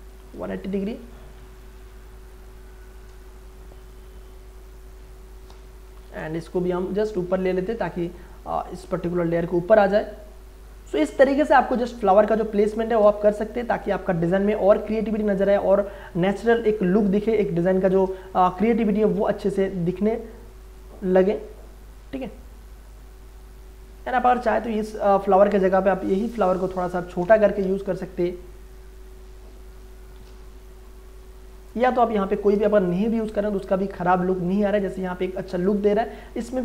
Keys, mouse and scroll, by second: 0.1 click, 0.5 space, 0.8 click, 0.9 space, 1.6 ctrl+click, 2.4 click, 3.4 click, 4.2-6.0 drag, 6.0 Return, 6.5-9.8 drag, 9.8-11.5 drag, 11.4 ctrl+space, 11.6 ctrl+click, 12.0 ctrl+space, 13.5-15.5 drag, 15.5 ctrl+space, 15.7 ctrl+click, 16.0 ctrl+space, 16.8 space, 17.1 ctrl+click, 17.4 click, 18.7-20.8 drag, 20.8-23.3 drag, 23.3-26.1 drag, 26.1-27.6 alt+drag, 27.6 ctrl+t, 28.7 alt+shift+click, 31.5 Return, 31.8 Delete, 32.6 space, 32.9-35.7 ctrl+drag, 35.7 space, 35.9-36.6 ctrl+drag.